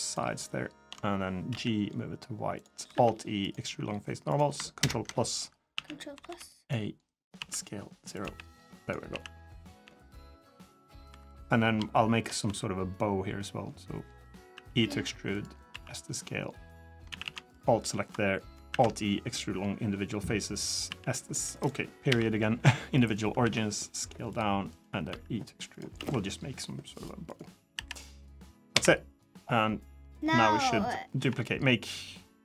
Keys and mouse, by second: 1.3 g, 1.4 click, 1.8 click, 2.5 click, 2.7 alt+e, 4.6 ctrl+KP_Add, 5.5 a, 5.9 b, 7.1 s, 8.0 g, 8.9 s, 9.6 g, 10.8 3, 11.1 click, 11.7 shift+middle click, 12.2 s, 14.3 e, 15.5 s, 16.9 a, 17.0 a, 17.3-17.9 alt+drag, 18.5 alt+e, 20.6 s, 23.2 s, 24.5 click, 24.9 e, 25.7 s, 27.5 l, 28.5 KP_7, 29.9 middle click, 30.9 KP_3.